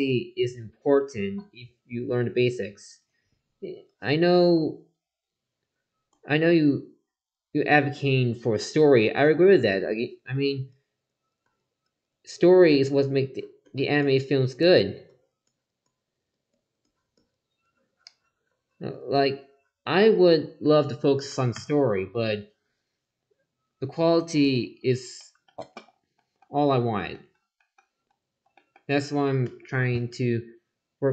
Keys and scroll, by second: 4.3 ctrl+z.